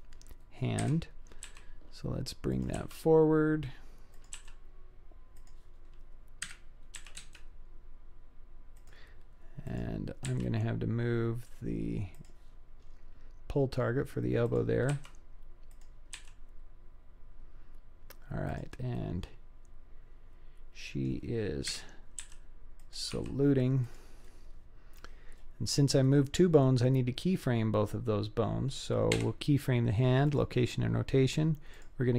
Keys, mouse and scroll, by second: 0.8 KP_7, 1.4 g, 2.8 r, 4.4 g, 6.4 KP_1, 7.0 g, 9.7 click, 10.3 g, 12.8-13.7 scroll up 3, 14.5 click, 15.0 r, 16.2 g, 19.0-21.1 middle drag, 21.7 KP_7, 22.3 g, 23.2 r, 24.3-25.0 middle drag, 25.3-25.9 scroll down 3, 25.9 scroll up 1, 26.1-26.7 middle drag, 29.2 i, 31.8 click.